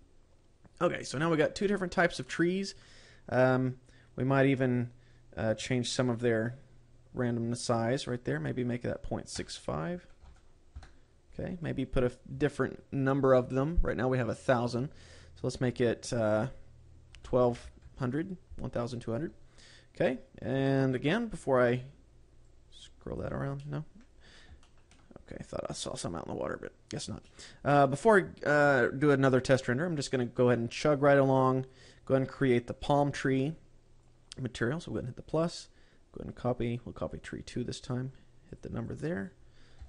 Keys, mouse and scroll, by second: 2.1-2.7 scroll up 4, 2.8 middle click, 4.7-6.1 scroll down 5, 6.1-7.7 scroll down 7, 7.7 click, 7.7 scroll down 1, 8.8 click, 12.0-14.8 scroll up 12, 15.2 click, 23.0 click, 24.1 middle click, 24.6-25.0 scroll down 3, 25.1 shift+middle click, 25.5 scroll up 1, 26.8-27.1 scroll up 2, 27.7 middle click, 31.2 click, 32.3 click, 34.5 click, 35.8 click, 38.2 click, 39.0 click.